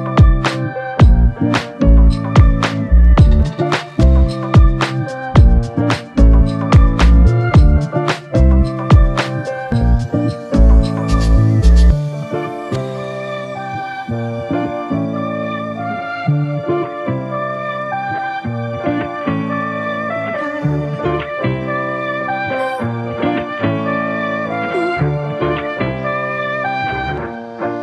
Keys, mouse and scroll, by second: 8.0 alt+shift+click, 8.8 alt+click, 16.4 f, 17.8 ctrl+click.